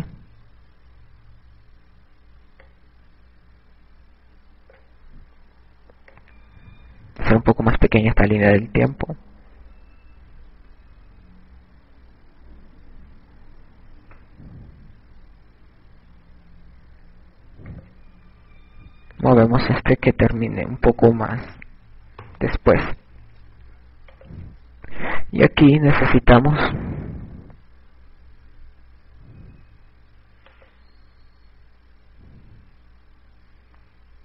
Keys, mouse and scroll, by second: 7.9 click.